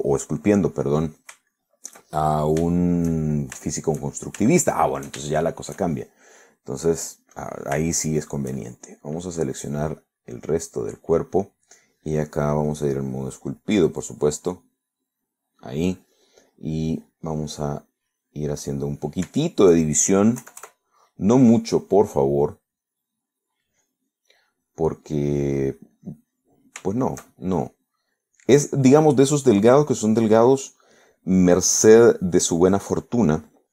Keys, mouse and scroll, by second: 0.1 middle click, 0.8 click, 1.5 middle click, 2.6 shift+middle click, 3.1 shift+middle click, 5.2 shift+middle click, 6.4 shift+middle click, 7.8 click, 8.4 click, 9.2 shift+middle click, 10.3 right click, 10.9 click, 11.5 middle click, 13.8 click, 15.1 click, 18.9 click, 20.4 shift+middle click, 21.5 KP_Add, 21.9-23.1 middle drag, 23.1 click, 23.7 middle click, 24.6 click, 25.7 click, 26.6-27.6 drag, 28.0 shift+middle click, 29.3 click, 29.9 click, 30.6 click, 32.1-33.1 drag, 33.3 middle click.